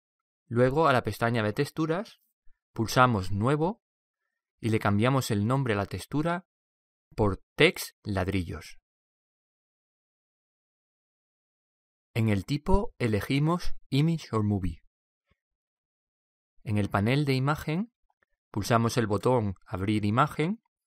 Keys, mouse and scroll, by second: 1.9-3.7 drag, 3.9-6.9 drag, 10.6 l, 13.0-14.6 drag, 16.8-18.4 drag, 20.8 click.